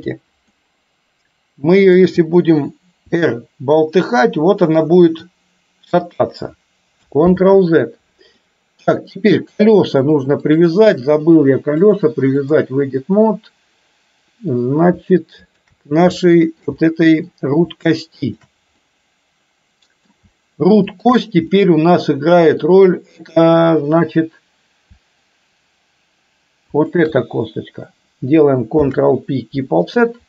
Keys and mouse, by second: 0.6-2.1 middle drag, 3.2 r, 7.3 ctrl+z, 8.5-9.2 middle drag, 10.6 click, 12.0-12.7 drag, 13.2-14.7 middle drag, 15.7 shift+click, 16.2 shift+middle click, 16.8 middle click, 18.5 shift+click, 18.8-20.2 middle drag, 21.6-22.7 middle drag, 26.8 shift+click, 28.8 ctrl+p.